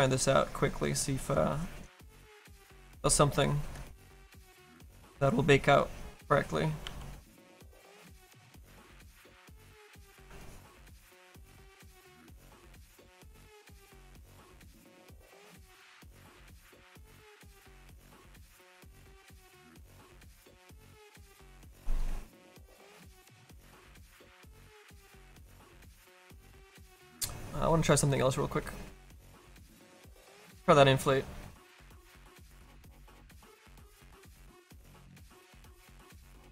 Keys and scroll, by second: 6.8 s, 7.3 s.